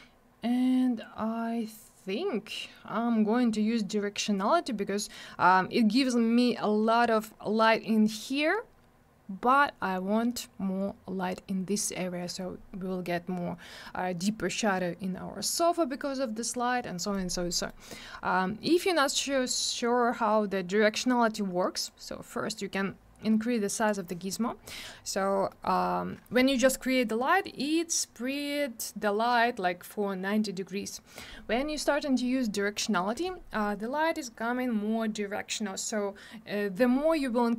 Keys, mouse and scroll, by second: 17.0 middle click, 17.2 middle click, 17.3 scroll down 1, 17.5 middle click, 17.7 middle click, 18.6-19.3 scroll up 1, 21.9 click, 23.9 click, 24.7 middle click, 24.8 middle click, 25.0 scroll down 1, 25.5 middle click.